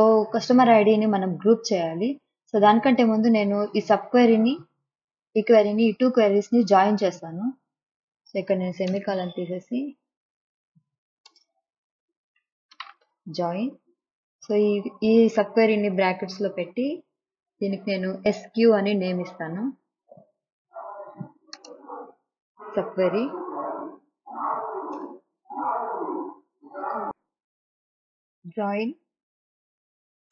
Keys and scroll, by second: 9.0 BackSpace, 11.4 Return, 12.3-13.6 typing, 16.6 shift+9, 20.4 shift+0, 21.7-23.4 typing, 25.1 Return.